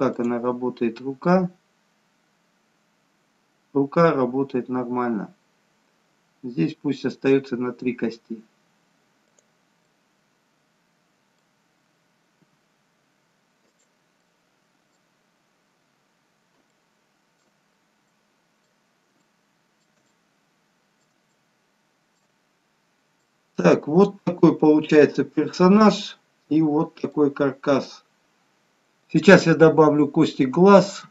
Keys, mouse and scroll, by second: 0.1 click, 0.6 g, 12.5 g, 14.4 middle click, 15.6-16.1 scroll down 2, 16.1-16.7 scroll up 1, 16.8 shift+middle click, 17.8-18.2 scroll up 2, 18.2 middle click, 19.3 shift+middle click, 20.1 middle click, 21.5 middle click, 22.7-23.2 scroll down 1, 23.2 middle click.